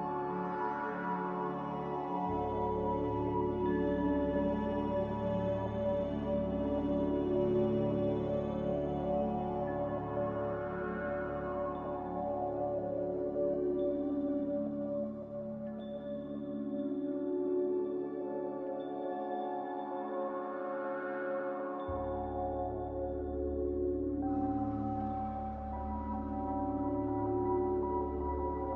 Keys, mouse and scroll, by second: 5.6 ctrl+c, 5.8 ctrl+v, 12.5 m, 19.0 ctrl+z, 19.4 ctrl+z, 20.7 Delete, 22.6 a.